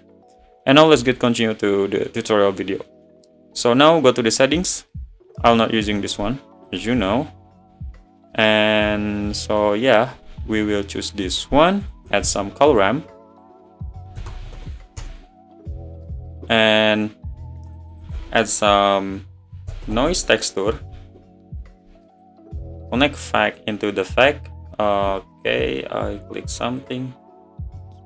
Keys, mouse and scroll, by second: 0.4 scroll down 2, 0.6-1.3 middle drag, 1.3 scroll up 2, 1.6-4.3 middle drag, 4.3 click, 6.8-11.4 right drag, 11.4 scroll down 6, 15.0 shift+a, 23.1 Left, 27.7 click.